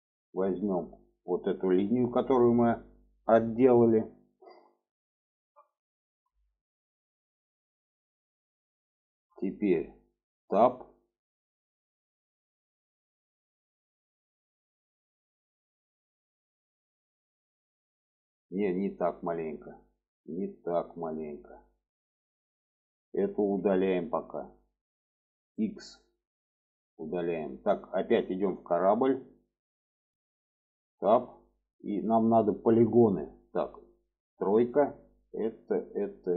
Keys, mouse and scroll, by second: 0.1 click, 0.9-1.5 middle drag, 3.8-6.0 middle drag, 6.3 shift+middle click, 7.2-8.2 shift+middle drag, 8.7 shift+middle click, 10.7 Tab, 18.5 middle click, 19.9 middle click, 20.7-21.9 alt+middle drag, 22.7 middle click, 23.3 Tab, 23.7 middle click, 25.3 x, 26.8-27.1 middle drag, 28.2 click, 29.4 n, 29.8 middle click, 30.7 Tab, 31.0-32.1 middle drag, 34.2 3, 35.5 click.